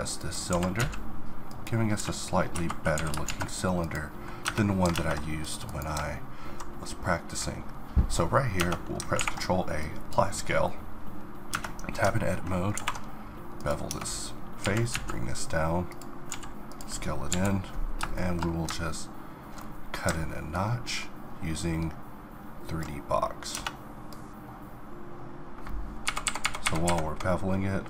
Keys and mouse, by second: 0.5 g, 2.9 s, 3.6 click, 4.4 Tab, 4.9 ctrl+Tab, 8.6 Tab, 9.1 ctrl+a, 11.5 Tab, 12.7 ctrl+b, 13.9 Tab, 14.6 g, 16.3 s, 17.3 KP_7, 18.3-22.0 middle drag.